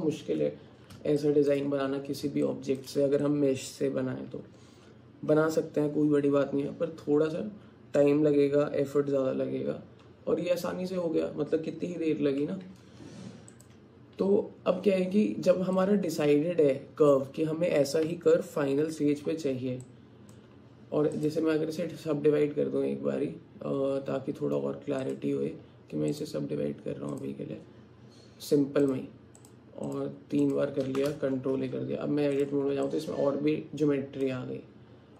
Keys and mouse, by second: 1.2 shift+click, 2.5 alt+shift+click, 3.2 alt+click, 13.1 Tab, 15.8-17.2 alt+drag, 19.9 alt+click, 21.2 click, 25.0 click, 26.1-27.2 drag, 28.9 click, 29.9 click, 30.4 click, 31.4 ctrl+a, 32.0 Tab, 32.9-34.3 drag.